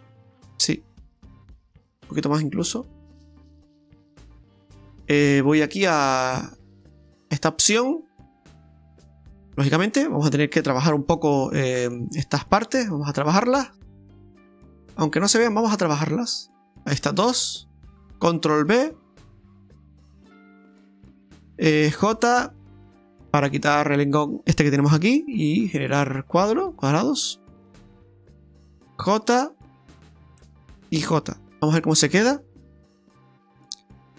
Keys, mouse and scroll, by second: 3.2 click, 4.5 middle click, 5.0 KP_Divide, 5.0 Tab, 5.0 scroll up 1, 6.2 click, 6.7 middle click, 8.3 click, 9.0 middle click, 10.8 middle click, 11.5 middle click, 12.9 middle click, 12.9 click, 15.4 right click, 16.0 alt+shift+right click, 16.7 middle click, 17.9 alt+shift+right click, 18.9 ctrl+b, 21.3 click, 21.3 shift+right click, 22.0 j, 23.1 shift+right click, 24.0 right click, 24.9 j, 25.8 middle click, 27.2 right click, 27.9 shift+right click, 29.0 j, 29.9 right click, 30.6 shift+right click, 31.6 KP_Divide, 31.6 scroll up 1, 31.9 middle click, 32.2 scroll up 1, 32.6 Tab, 33.0 scroll up 1, 33.3 middle click.